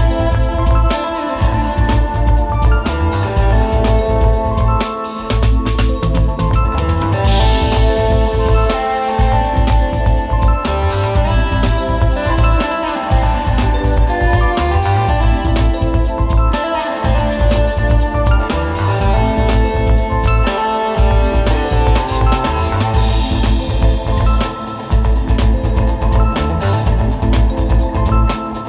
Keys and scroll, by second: 0.1 super+z, 1.8 super+[, 4.6 super+g, 5.3 space, 5.6 super+", 5.8 super+", 6.9 super+z, 11.4 space, 11.8 space, 13.1 super+z, 13.9 alt+super+space, 16.7 super+;, 17.0 super+", 18.0 space, 18.2 space, 22.7 alt+super+space, 24.8 space, 25.7 alt+super+space, 26.8 space.